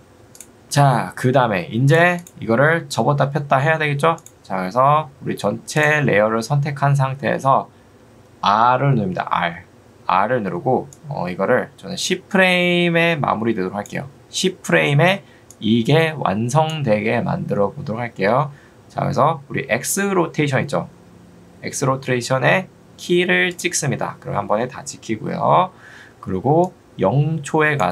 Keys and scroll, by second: 9.6 r, 18.4 Escape.